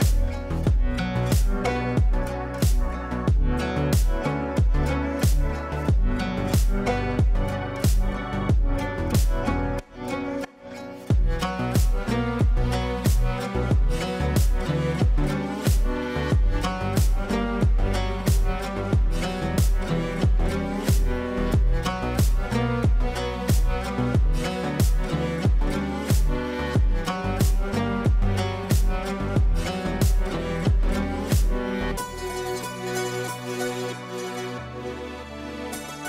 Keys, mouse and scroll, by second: 4.7-6.6 drag, 6.8-8.9 drag, 8.9 ctrl+z, 10.0-15.8 drag, 15.8 right click, 16.5-21.2 drag, 22.0 shift+click, 22.7 c, 23.3 shift+click, 23.8 c, 24.0 click, 26.2-28.4 shift+drag, 28.4-28.7 shift+drag, 28.9 shift+click, 29.6 e, 30.4 click, 32.0-32.9 shift+drag.